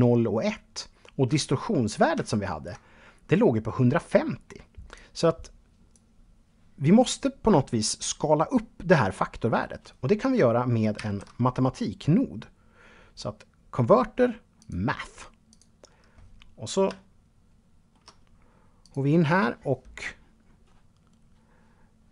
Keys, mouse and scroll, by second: 1.5 ctrl+right click, 4.1 click, 10.1 shift+a, 13.8 click, 14.7 click, 15.0-16.1 scroll up 2, 16.1-17.4 shift+middle drag, 18.0 click.